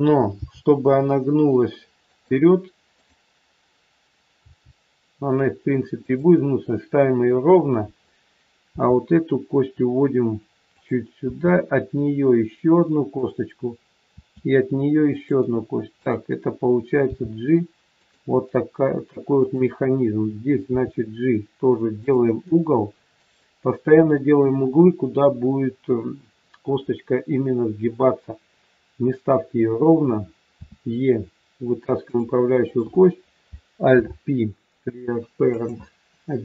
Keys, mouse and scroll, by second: 0.4 g, 2.9 click, 4.4 g, 8.0-8.7 scroll up 1, 8.7 e, 11.2 e, 16.0 click, 17.0 g, 19.4 click, 20.6 g, 30.6 e, 32.5 click, 33.9 alt+p.